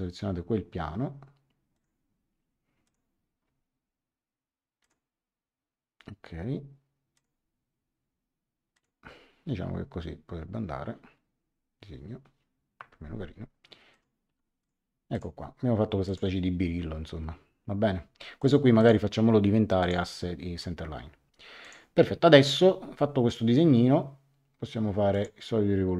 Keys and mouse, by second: 1.7 click, 2.8 click, 4.8 click, 7.1 click, 8.7 click, 12.7 Escape, 13.9 click, 14.2 x, 14.6 click, 18.4 click, 19.8 click, 21.6 click, 25.1 click.